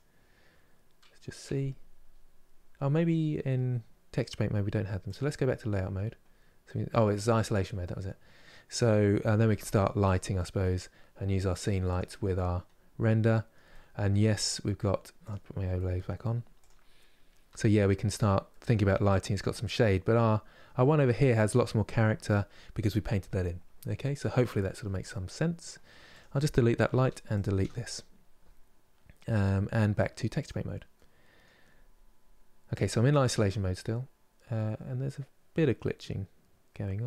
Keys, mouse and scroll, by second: 1.7 scroll down 4, 4.8 click, 5.3-5.7 scroll down 1, 6.4-9.1 middle drag, 9.1 shift+d, 10.1-11.3 middle drag, 11.3 click, 11.7 click, 12.4 scroll up 2, 12.9-14.9 middle drag, 14.9 click, 15.5 middle click, 16.4 click, 17.2 g, 18.2 middle click, 18.7-19.4 scroll down 1, 19.4 middle click, 20.0 scroll down 2, 20.5-25.9 shift+middle drag, 25.9 click, 26.7 Delete, 27.1 click, 27.3 Delete, 30.2 click, 30.7 middle click, 31.4-32.4 scroll up 3, 32.4-37.0 middle drag.